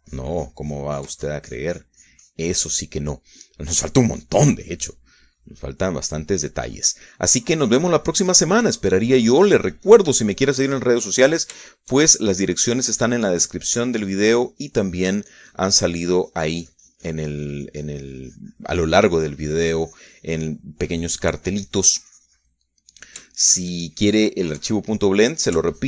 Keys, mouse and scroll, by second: 1.1-4.7 ctrl+drag, 4.7 ctrl+middle click, 5.5 middle click, 6.0 click, 7.1-12.0 middle drag, 12.1-13.4 middle drag, 13.5-14.9 shift+middle drag, 15.1-25.1 drag, 25.1 shift+middle click.